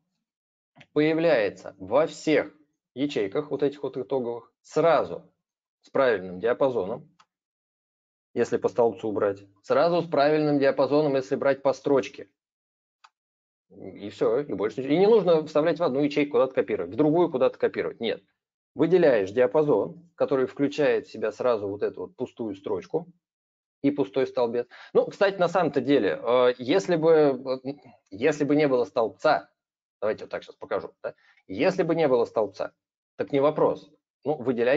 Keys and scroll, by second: 30.1 ctrl+-, 32.1 ctrl+shift+Right, 34.2 ctrl+a.